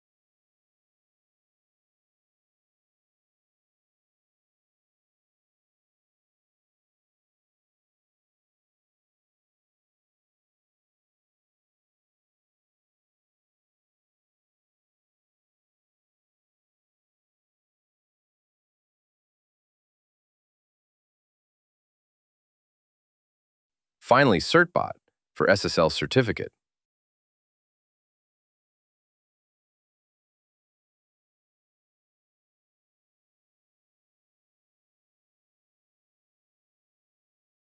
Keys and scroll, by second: 23.6 super+v, 27.3 shift+@, 28.8 BackSpace, 34.2 shift+y, 36.2 shift+n.